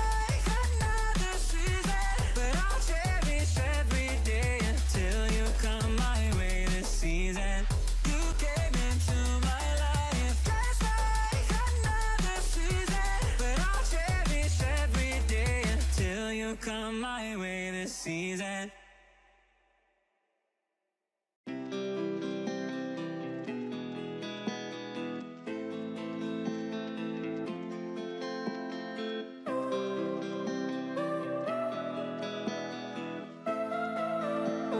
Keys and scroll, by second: 5.0 ctrl+z, 8.1 ctrl+=, 11.2 ctrl+z, 14.6 ctrl+-, 15.3 ctrl+=, 19.1 ctrl+=, 21.9 ctrl+z, 24.9 ctrl+s.